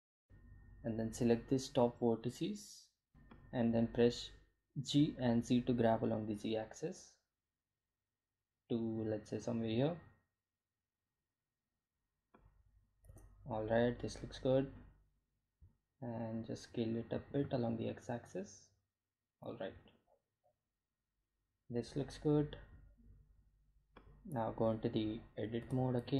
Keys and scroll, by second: 2.8 g, 3.4 z, 12.4 Tab, 17.0 s, 17.2 x.